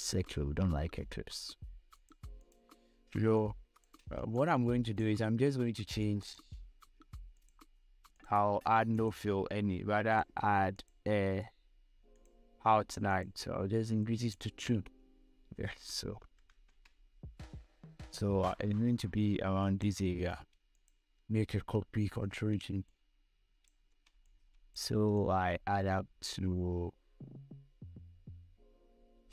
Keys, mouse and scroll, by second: 1.4 v, 2.3 click, 3.2 scroll up 1, 3.6 space, 3.7 click, 4.2 space, 4.7-17.3 drag, 18.4-21.1 drag, 22.4 ctrl+j, 23.2 shift+click, 24.5 space, 24.7 click, 24.9 space, 25.5-29.3 shift+drag.